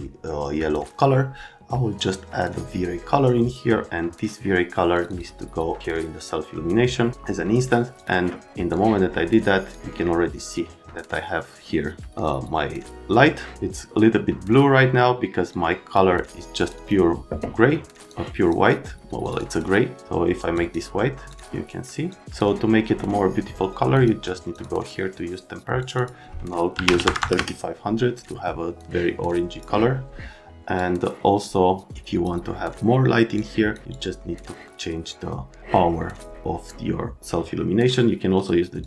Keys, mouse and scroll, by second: 3.5 click, 4.9 click, 5.0 click, 5.8 click, 8.0 click, 8.7 click, 15.5 click, 16.6 click, 16.7 click, 18.1 click, 19.2 click, 19.4 click, 20.5 click, 21.3 click, 22.1 click, 23.9 click, 24.5 click, 25.8 right click, 26.0 right click, 26.7 KP_3, 26.8 KP_5, 27.0 KP_0, 27.2 KP_0, 27.3 KP_Enter, 28.8 right click, 28.8 click, 30.8 click, 31.9 click, 33.3 click, 33.9 click, 38.4 click, 38.8 click.